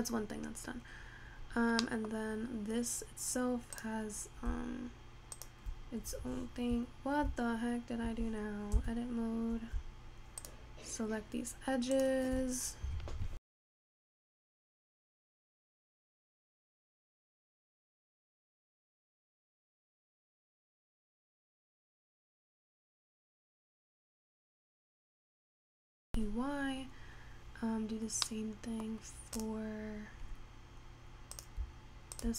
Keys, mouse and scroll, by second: 2.2 middle click, 2.4-4.0 scroll up 3, 4.0 click, 5.4 shift+click, 6.3 Tab, 9.0 Tab, 10.6 shift+click, 12.1 shift+click, 15.2 middle click, 15.8-17.0 scroll down 2, 17.6 e, 19.9 scroll down 1, 20.0 middle click, 20.3-20.7 scroll up 5, 28.5 middle click, 29.5 click, 31.6 click, 32.2 shift+click.